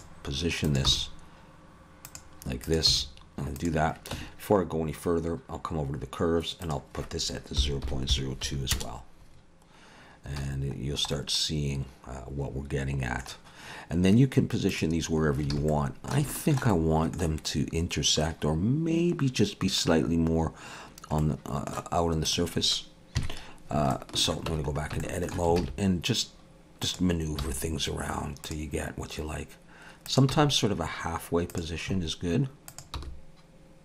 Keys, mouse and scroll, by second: 0.7 click, 0.9 g, 2.7 click, 2.9 g, 4.1 Tab, 6.6 click, 10.4 alt+a, 10.8-11.1 scroll down 2, 11.1 middle click, 14.7 click, 15.3 scroll up 1, 15.5 alt+a, 15.7 middle click, 16.3 shift+middle click, 16.7 middle click, 21.2 middle click, 22.3 click, 23.2 KP_3, 23.9 shift+middle click, 24.5 Tab, 24.7 scroll up 3, 25.0 shift+middle click, 25.6 alt+a, 26.8 click, 27.4 g, 30.1 click, 30.3 g, 32.7 click, 33.0 g.